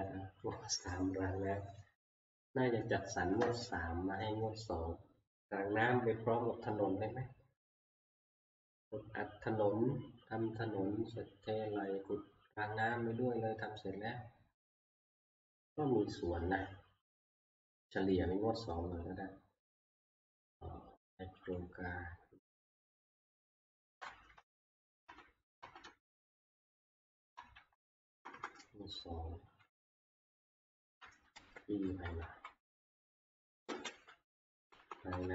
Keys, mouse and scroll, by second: 0.6 click, 21.6 click, 23.6 click, 24.5 Right, 25.1 ctrl+Right, 25.6 click, 25.8-26.7 Right, 27.2 Right, 27.2-28.3 drag, 27.4 Right, 27.5 Right, 27.8 Right, 28.1 Left, 28.3 Left, 29.4 F2, 30.7 Home, 31.3 ctrl+c, 31.8 Right, 31.8 Escape, 32.3 Left, 32.8 F2, 33.8 ctrl+v, 34.6 Left, 34.8 Left, 35.0 Left, 35.2 Left.